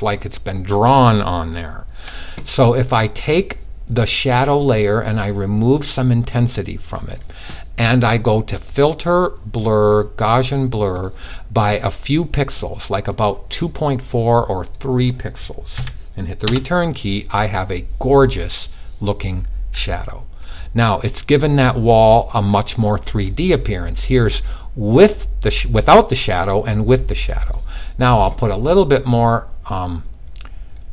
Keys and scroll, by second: 15.2 3.